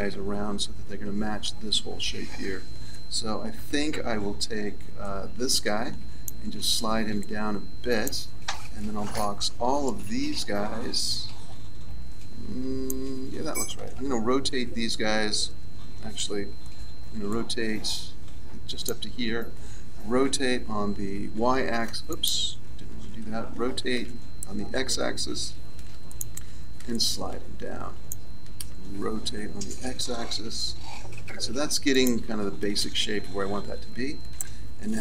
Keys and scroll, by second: 5.0 b, 9.2 b, 16.1 a, 16.9 b, 20.2 r, 23.0 ctrl+z, 24.0 r, 29.2 r, 34.3 a.